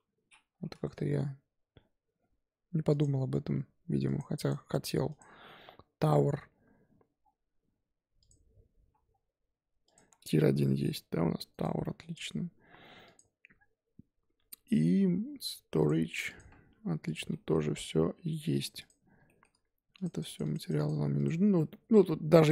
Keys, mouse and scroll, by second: 2.9-4.1 drag, 4.4 click, 7.2-7.6 scroll down 1, 8.2 click, 9.0-9.8 scroll down 2, 9.8 click, 10.6 middle drag, 10.8 g, 11.8-12.1 middle drag, 12.1 click, 13.0 click, 16.2 click, 16.5-17.0 scroll up 4, 17.0 click, 17.3-17.6 middle drag, 17.6-18.5 scroll up 3, 18.5 click, 18.8 click, 19.2 shift+middle click, 19.9-22.5 drag, 20.2-20.7 Left, 21.1 Left, 22.4 Left.